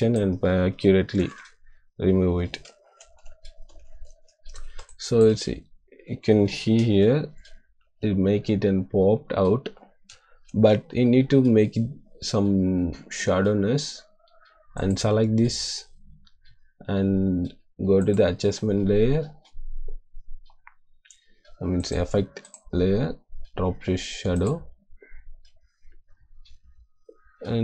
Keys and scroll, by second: 1.1 ctrl+d, 4.7 space, 10.4 -.